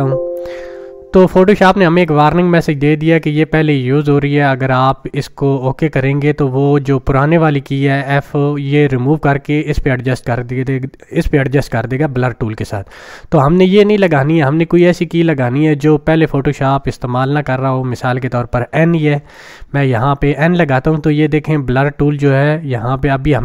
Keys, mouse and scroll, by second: 14.1-15.0 drag, 19.0 n.